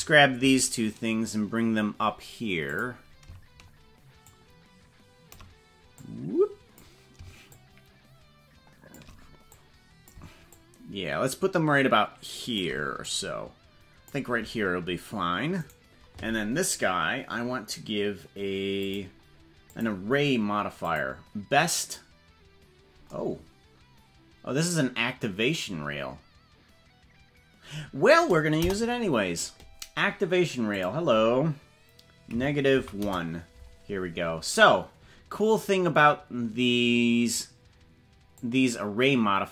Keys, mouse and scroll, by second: 2.8 click, 4.4-5.4 shift+drag, 6.0-7.0 drag, 7.6-9.0 shift+drag, 9.6 click, 10.5-12.6 shift+drag, 13.2-14.2 drag, 15.8 right click, 18.9 click, 19.7-21.1 drag, 28.7 KP_0, 30.7-33.7 drag, 38.3-39.5 drag.